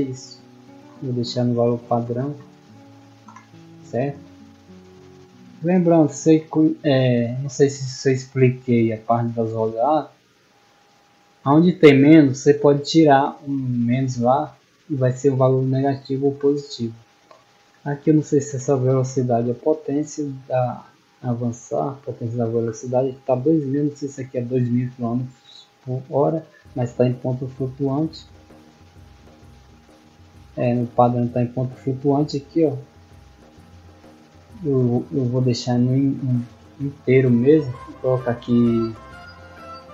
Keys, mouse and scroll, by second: 10.6 middle click, 12.6 middle click, 13.0 middle click, 17.1 middle click, 18.1 middle click, 24.0 click, 26.8 right click, 28.1 click, 29.1 click, 30.7-32.0 typing, 35.2 click, 35.9 click.